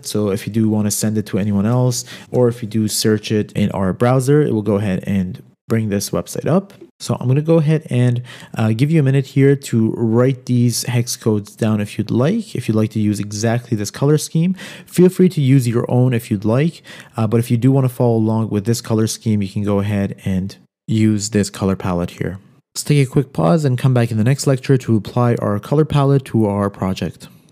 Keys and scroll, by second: 2.1 shift+super+n, 2.2 super+v, 2.8 Return.